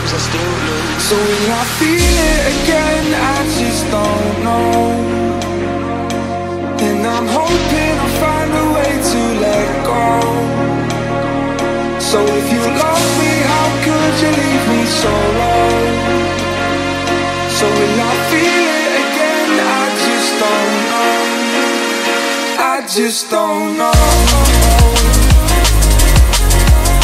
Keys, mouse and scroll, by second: 0.0 space, 1.4-3.1 drag, 3.1 space, 7.4 click, 10.4-13.4 drag, 16.6 space, 25.3 space.